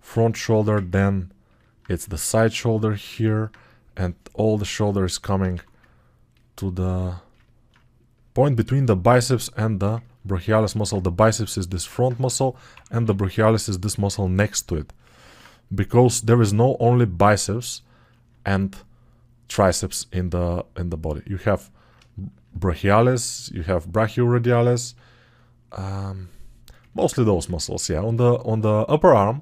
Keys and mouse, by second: 3.0 2.